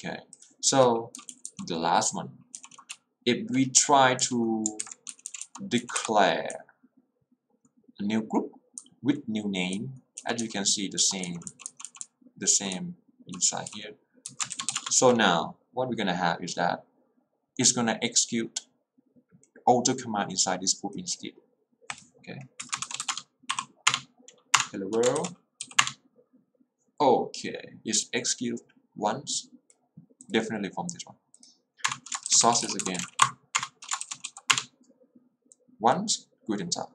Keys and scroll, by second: 1.2 j, 3.0 h, 4.3 k, 5.2 j, 6.2 x, 6.5 l, 10.2-12.8 typing, 14.4 Escape, 14.8 Return, 22.7 Escape, 23.0 q, 23.2 Return, 23.6 Up, 23.9 Return, 25.8 w, 26.0 Return, 32.0 Return, 32.3-34.4 typing, 33.7 Return, 34.6 Return.